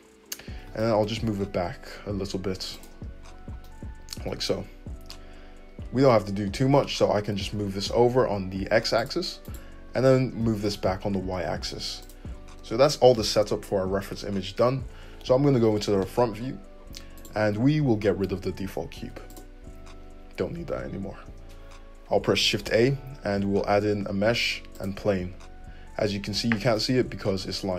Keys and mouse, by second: 0.6 g, 3.6-9.5 middle drag, 6.8 g, 9.5 click, 9.9-17.8 middle drag, 10.4 g, 15.4 `, 19.0 x, 22.6 shift+a.